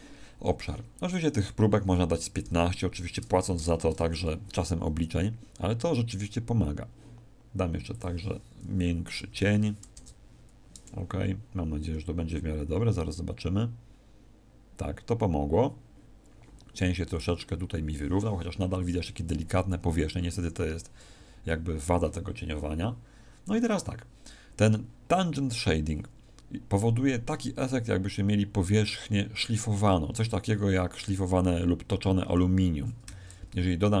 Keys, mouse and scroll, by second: 33.0 Escape, 33.6-34.0 scroll down 3.